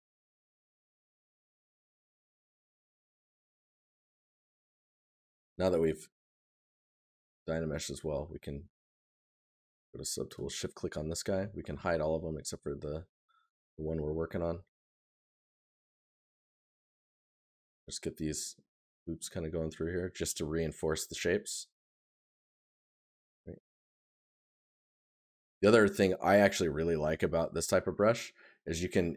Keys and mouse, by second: 0.6 right click, 2.5 right click, 7.2 right click, 11.0 right click, 15.2 right click, 19.0 right click, 20.8 right click, 28.6 right click.